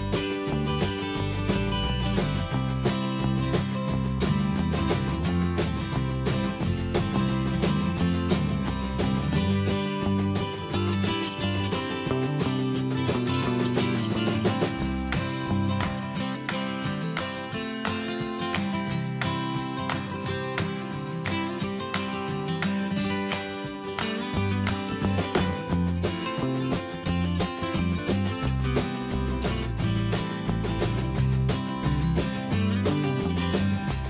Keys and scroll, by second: 1.5 BackSpace, 1.7 Return, 3.3 ctrl+g, 6.6 ctrl+z, 14.0 ctrl+2, 18.3 ctrl+d, 20.7 ctrl+z.